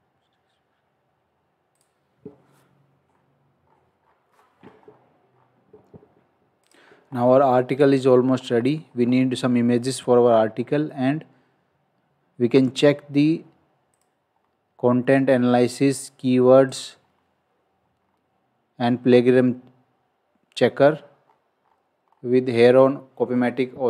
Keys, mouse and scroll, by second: 1.7 click, 3.0-3.6 scroll down 1, 3.6 scroll up 1, 5.2-6.1 scroll down 1, 6.6 click, 7.0 scroll up 1, 8.4 scroll down 1, 9.0 scroll up 1, 10.3-11.0 scroll down 1, 13.9 click, 14.3-14.6 scroll down 1, 16.7 click, 17.0-17.7 scroll down 1, 21.1-22.6 scroll up 1.